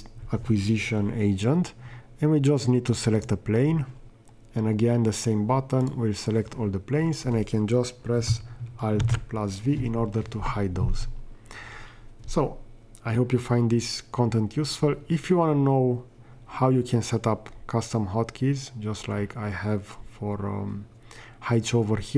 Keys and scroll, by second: 9.0 alt+v.